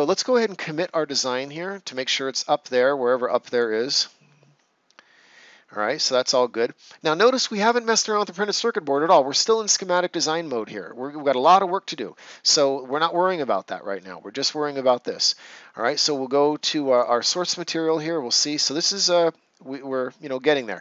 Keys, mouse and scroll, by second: 0.7 right click, 1.8 click, 16.9 click.